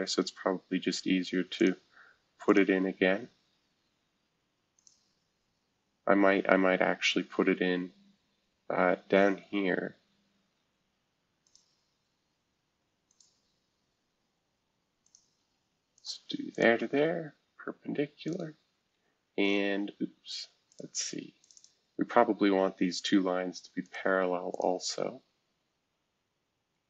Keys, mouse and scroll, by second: 1.6 click, 2.4 click, 4.8 click, 5.6 Escape, 6.0-6.6 scroll down 2, 11.4-13.0 drag, 13.1-14.7 drag, 15.0 click, 15.4 Escape, 16.0 click, 16.5 shift+click, 18.2 click, 18.9 Escape, 20.7 click, 21.4 click, 21.5 click, 23.8 click, 24.5 shift+click.